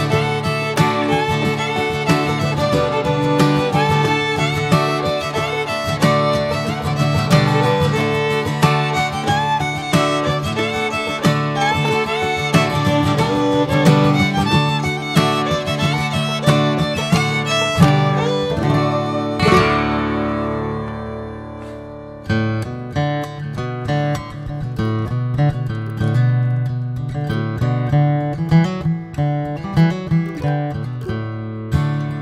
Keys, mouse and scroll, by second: 0.3-0.7 middle drag, 0.7 Tab, 1.0 click, 1.3 middle click, 1.6 scroll up 4, 1.9 middle click, 2.2 alt+z, 2.5 click, 2.7 scroll down 4, 2.9 middle click, 3.2 Tab, 3.4 drag, 3.6-4.2 middle drag, 4.2 click, 4.4-5.5 right drag, 5.5 drag, 5.7 scroll down 1, 5.9-7.3 middle drag, 7.3 scroll up 2, 8.9 scroll down 1, 9.1-11.0 middle drag, 11.0 scroll up 2, 11.5 drag, 11.8 Tab, 12.2 alt+middle click, 12.4 alt+middle click, 13.0 scroll up 1, 13.2 alt+z, 13.5 shift+middle click, 13.8 scroll up 3, 14.2 middle click, 14.5 alt+z, 14.9 click, 16.1 3, 16.3 click, 16.6 alt+middle click, 17.6 scroll up 2, 18.3 alt+z, 18.6-19.0 scroll down 3, 19.0 middle click, 21.8 alt+middle click, 22.2 alt+z, 22.8 middle click, 23.3 alt+z, 23.5 alt+middle click, 23.9-25.1 alt+middle drag, 25.1 e, 30.0 click, 31.2 click.